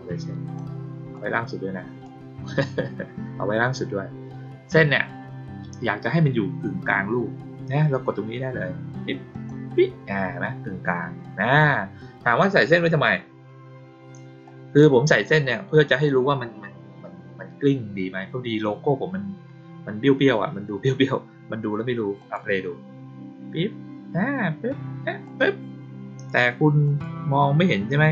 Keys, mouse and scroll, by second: 1.1-2.0 drag, 9.2 click, 12.5 click, 14.4-16.0 drag, 22.1 click, 25.2 click, 26.8 click.